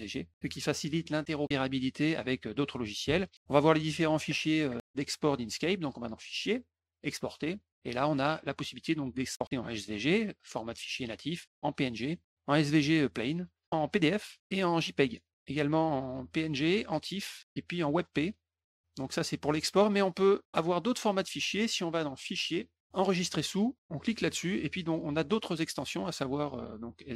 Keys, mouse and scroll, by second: 6.0 click, 6.9 click, 8.1 click, 19.4 middle click, 20.7 middle click, 21.1 middle click, 22.3 click, 22.9 click, 23.9 click.